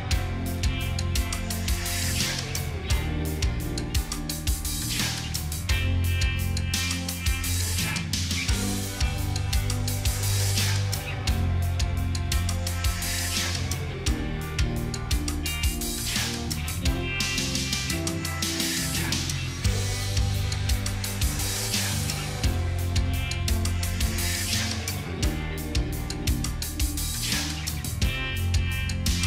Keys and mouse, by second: 4.1 right click, 8.5 right click, 8.9 ctrl+-, 9.2 ctrl+-, 9.6 ctrl+-, 10.0 ctrl+t, 11.0 shift+click, 20.6 ctrl+=, 21.1 ctrl+=, 21.6 ctrl+=.